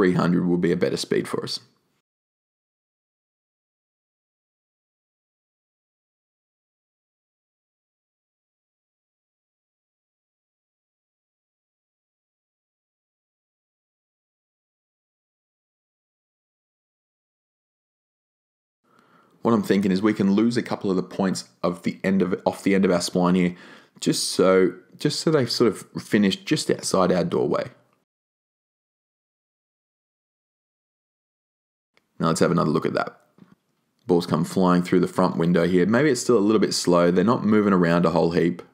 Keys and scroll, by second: 28.0 BackSpace, 29.3 BackSpace.